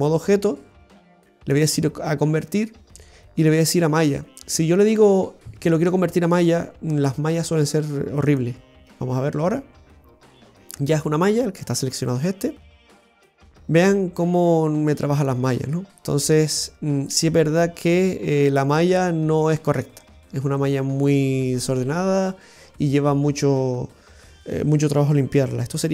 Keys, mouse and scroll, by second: 1.4 click, 12.2 Tab, 12.9-13.4 scroll up 1, 13.4 scroll up 1, 13.6 middle click, 15.3 scroll up 2, 16.1 middle click, 20.0-20.4 scroll down 3, 22.8-24.0 scroll down 1.